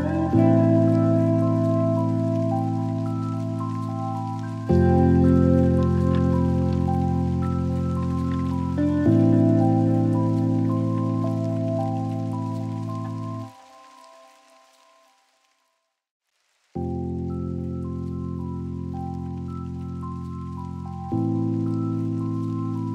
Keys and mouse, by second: 0.2-1.6 drag, 3.6-6.1 drag, 16.9 click, 17.9 click, 18.9 r.